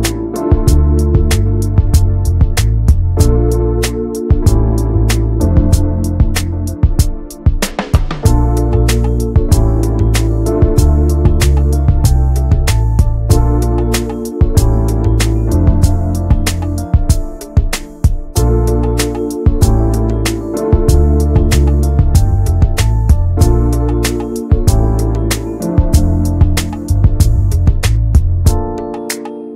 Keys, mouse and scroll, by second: 0.2 shift+middle click, 1.0 click, 1.5 shift+middle click, 2.3 r, 4.0 alt+z, 4.6 middle click, 4.9-5.9 scroll down 1, 5.9 click, 6.3 middle click, 6.7-7.2 scroll up 1, 7.4 alt+middle click, 8.0-8.5 scroll down 2, 8.5 middle click, 9.1 scroll up 1, 9.2 scroll down 1, 9.4 middle click, 9.7 Tab, 10.0-10.3 scroll down 1, 10.3-11.7 middle drag, 11.7 ctrl+z, 12.1 ctrl+z, 12.4-12.8 scroll down 1, 13.1 alt+middle click, 13.5 scroll up 1, 13.9 alt+z, 14.2 shift+middle click, 14.4-14.9 scroll up 1, 14.9 s, 17.8 alt+z, 18.1 middle click, 18.9 click, 19.1 Tab, 19.3 scroll down 1, 19.5 middle click, 20.1 scroll down 2, 20.3 middle click, 21.7 shift+middle click, 22.4 scroll down 1, 22.6 shift+middle click, 22.9 alt+z, 23.2 shift+middle click, 23.4 click, 23.6 alt+z, 25.3 click, 28.7 scroll down 1, 29.0 alt+z, 29.1-29.5 middle drag.